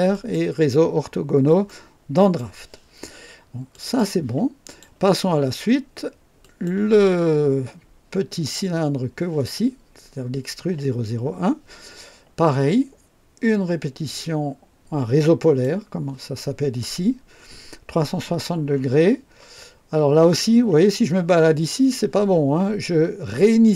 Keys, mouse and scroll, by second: 0.1 click, 1.6-2.5 right drag, 3.7 click, 4.6 click, 6.4 click, 15.3 click, 23.6 click.